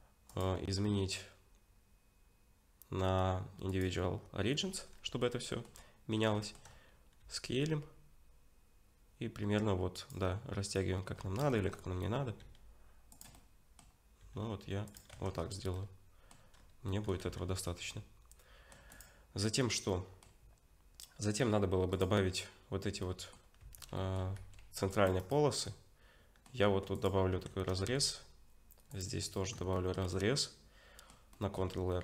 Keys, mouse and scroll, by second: 0.3 click, 4.9-5.3 scroll up 1, 5.3 middle click, 5.7-6.3 scroll up 2, 6.4 shift+middle click, 6.7-7.2 scroll up 1, 7.2 s, 11.2-12.4 scroll up 5, 11.5 shift+middle click, 12.4 s, 13.3 middle click, 14.2 s, 15.1 Tab, 15.3-15.7 scroll down 6, 15.7 middle click, 16.5-17.0 scroll down 2, 16.9 middle click, 17.3 ctrl+s, 17.5-18.1 scroll down 3, 17.9 middle click, 18.9 click, 19.9 middle click, 21.9 click, 23.0 middle click, 23.6 Tab, 24.0 middle click, 24.4 ctrl+r, 25.6 middle click, 26.6 Tab, 26.9 click, 27.3 Tab, 27.8 ctrl+r, 29.7 shift+middle click, 30.1 middle click.